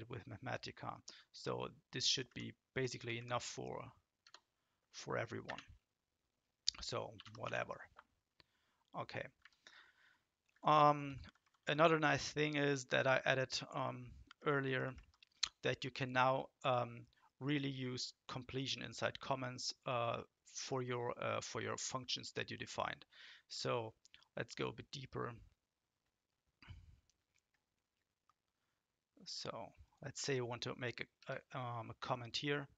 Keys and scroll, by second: 2.1 Down, 2.3 Down, 2.9 Down, 3.1 Down, 4.2 Return, 6.9-7.9 typing, 9.4 Up, 10.3-11.2 typing, 14.3 Down, 14.5 Down, 14.7 Down, 14.9 Down, 31.2 Return.